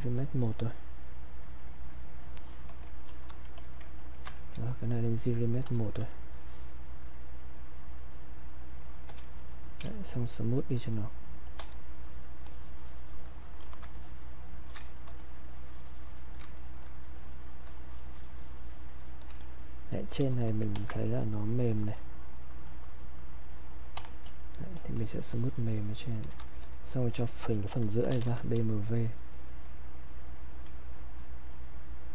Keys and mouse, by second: 2.5 click, 3.0 shift+f, 3.6 alt+click, 4.0 ctrl+right click, 5.4 ctrl+click, 9.1 ctrl+q, 9.4 ctrl+click, 9.8 ctrl+space, 12.0 shift+click, 13.6 shift+f, 14.0 shift+click, 15.2-16.6 shift+drag, 16.6 click, 17.1-19.4 shift+drag, 20.7 ctrl+shift+1, 21.1 shift+click, 21.7 click, 25.1 shift+click, 26.9 click, 27.7-28.7 typing, 28.9 click.